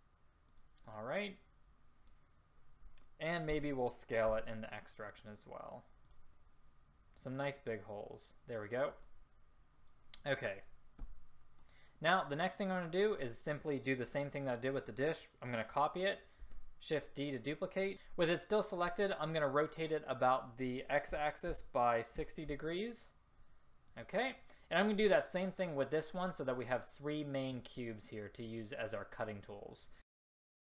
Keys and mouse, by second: 3.6 s, 11.1 a, 16.4 shift+d, 21.2 r, 30.1-30.6 typing.